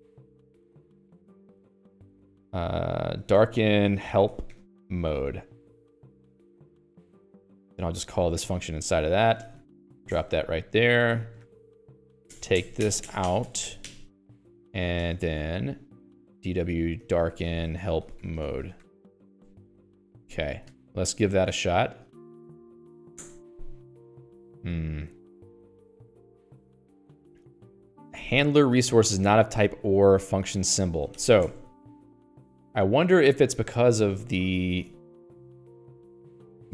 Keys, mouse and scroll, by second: 0.0-1.9 typing, 3.3-6.3 typing, 6.8 Return, 7.4-15.6 typing, 10.5 Escape, 12.3 Escape, 14.3 Escape, 16.8-20.1 typing, 19.7 Escape, 20.4 ctrl+s, 20.5 Escape, 35.2 Escape, 35.3 Escape, 35.7 k.